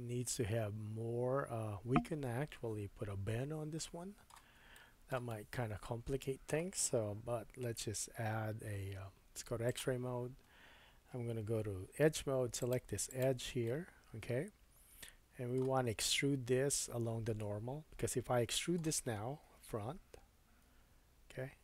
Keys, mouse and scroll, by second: 7.2 Tab, 9.7-12.7 drag, 11.6 2, 12.7 alt+middle click, 13.1 alt+click, 13.2-21.6 alt+middle drag, 19.5 KP_1, 20.6 e.